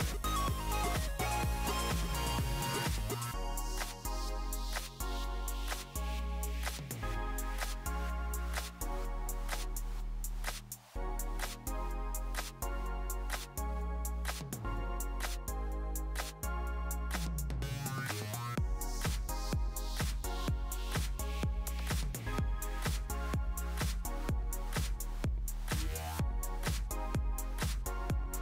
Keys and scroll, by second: 2.5 typing, 12.9-14.1 typing, 15.4 super+z, 23.1 h.